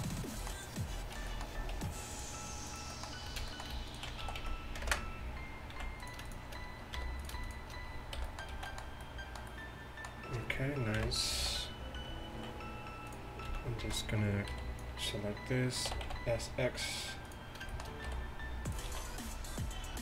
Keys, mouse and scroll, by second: 1.8 ctrl+r, 2.7 ctrl+r, 4.3 s, 5.8 z, 7.0 j, 8.2 j, 8.3-9.7 drag, 8.6 z, 10.0 click, 11.0 KP_1, 11.4 z, 13.5 z, 13.9 z, 14.6 b, 16.0 s, 18.9 z.